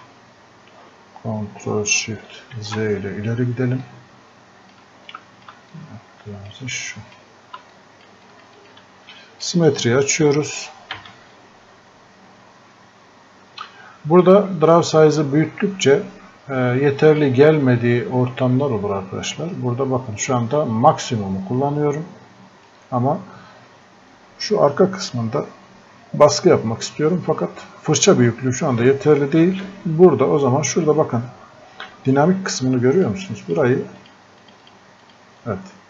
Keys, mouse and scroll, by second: 2.3 ctrl+shift+z, 3.9-7.7 drag, 8.2 shift+click, 11.0 x, 12.5 right click, 20.1 right click.